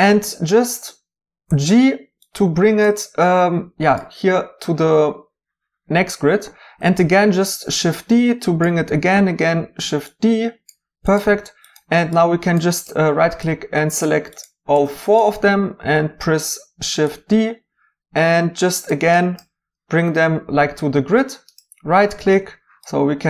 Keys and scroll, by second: 1.5 g, 7.0 d, 9.1 d, 15.8 d.